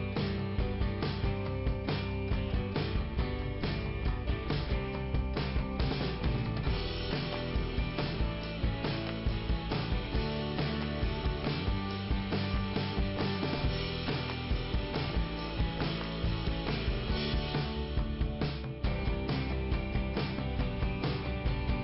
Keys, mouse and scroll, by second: 0.8 click, 2.2 click, 3.5 click, 7.2 click, 9.7 click, 12.4 click, 12.5 click, 14.2 click, 18.1 click, 21.5 click.